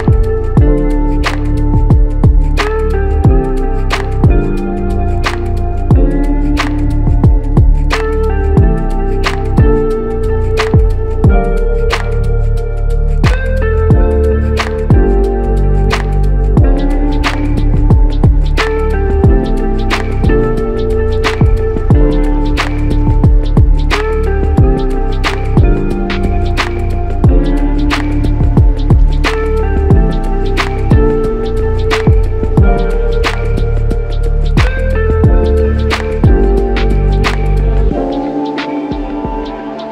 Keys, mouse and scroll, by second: 1.7 typing, 2.7 alt+a, 3.1 Tab, 3.8-5.5 scroll down 1, 5.9 ctrl+Tab, 6.6 typing, 7.7-8.0 typing, 11.5-12.1 scroll up 1, 12.1 typing, 12.3 scroll up 1, 13.1-13.6 scroll down 1, 13.6-14.3 typing, 13.7-14.3 scroll down 1, 35.8 typing.